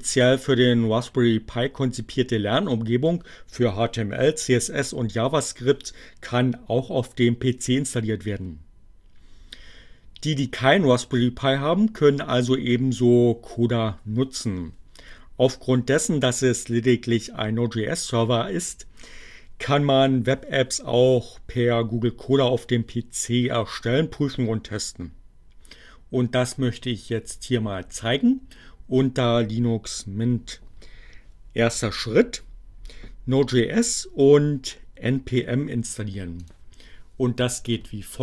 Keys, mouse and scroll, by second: 36.4 click.